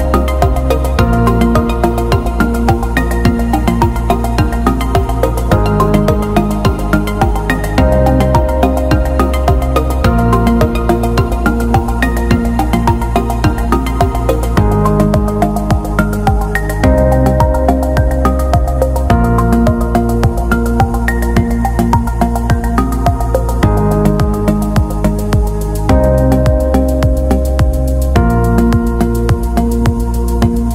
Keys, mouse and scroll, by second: 2.6-3.4 scroll down 1, 5.9 click, 6.0 right click, 8.6 F3, 10.3 click, 10.9 d, 11.9 click, 13.5 x, 14.8 click, 15.5-15.9 alt+scroll down 1, 16.9-17.3 alt+scroll up 1, 19.1 click, 21.5 shift+click, 22.1 shift+click, 24.0-24.5 alt+scroll down 1, 24.7 click, 26.6-26.9 scroll down 1, 28.1 ctrl+e, 28.9 click.